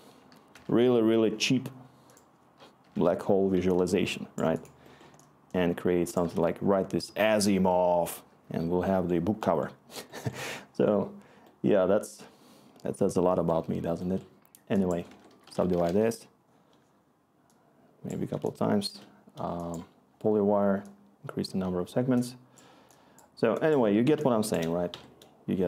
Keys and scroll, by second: 0.3-1.0 typing, 2.6-6.2 typing, 15.0-17.0 typing, 24.9 Escape.